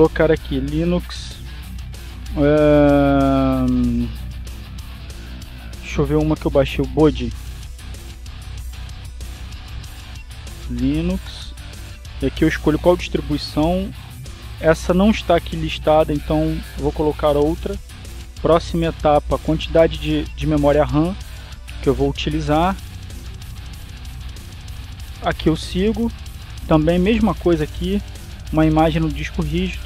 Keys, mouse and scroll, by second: 1.7-3.2 typing, 8.5-10.6 typing, 11.4 click, 12.1 click, 12.9 click, 17.9 click, 19.6 click, 24.3 click, 26.8 click.